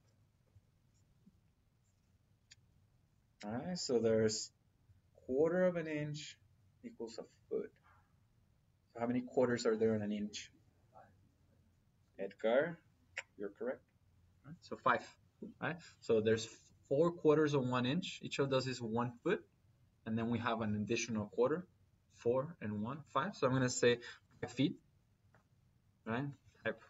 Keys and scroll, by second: 24.0 5, 25.1 Return.